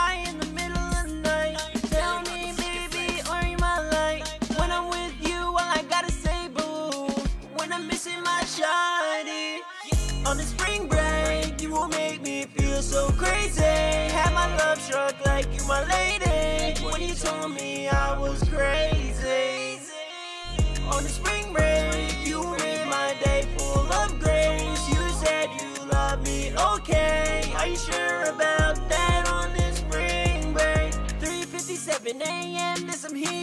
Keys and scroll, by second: 5.7 ctrl+super+w, 6.3 super+Tab, 9.1 super+Tab, 16.4 super+Tab, 17.2 super+Tab, 18.2 ctrl+super+w, 28.3 typing, 31.3-32.2 typing.